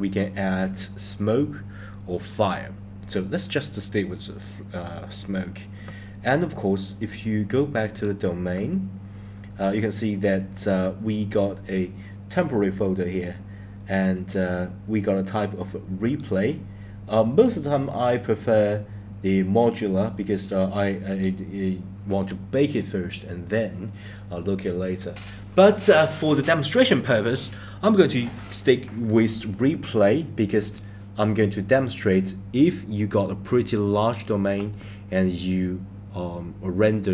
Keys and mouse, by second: 7.9 click, 16.0-21.3 drag.